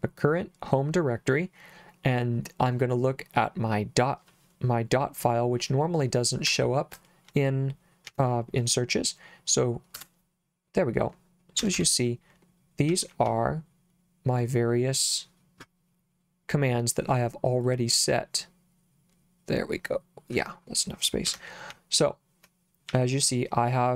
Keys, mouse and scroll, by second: 6.5 BackSpace, 8.1 c, 9.9 Return, 11.6 Escape, 12.9 j, 13.3 j, 17.6-20.3 drag, 21.3 Escape, 21.7 k, 22.9 j.